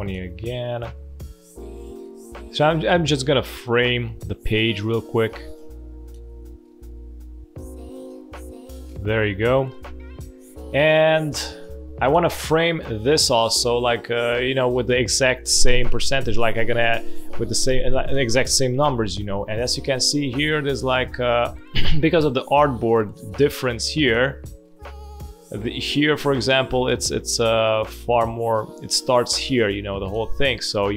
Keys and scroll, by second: 9.6 space, 10.7 space, 21.1 space, 25.2 space.